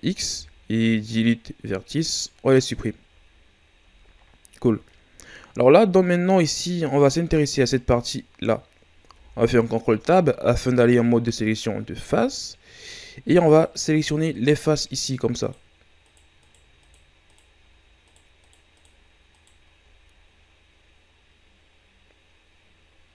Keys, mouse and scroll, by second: 2.8 scroll down 2, 3.4-4.0 shift+scroll up 1, 4.0-4.3 scroll up 2, 9.1 ctrl+Tab, 13.4 right click, 14.3 shift+right click, 14.9 shift+right click, 15.4 shift+right click, 16.4 shift+right click, 16.8 shift+right click, 17.3 shift+right click, 18.0 shift+right click, 18.4 shift+right click, 18.7 shift+right click, 19.3 shift+right click, 20.0 scroll down 3, 22.3-22.7 scroll up 2.